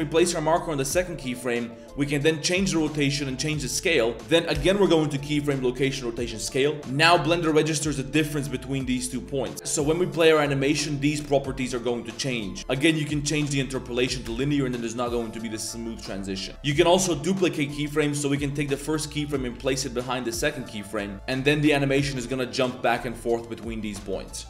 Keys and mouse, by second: 1.1 shift+click, 1.9 r, 3.3 s, 4.6 i, 7.1-9.5 drag, 9.5 space, 12.6 space, 12.6 t, 14.0 click, 14.3 space, 16.0 click, 16.6 click, 17.1 shift+d, 19.6 g, 20.3 shift+click, 20.5 g, 20.9 drag, 21.1 space, 21.1 shift+d, 24.0 space.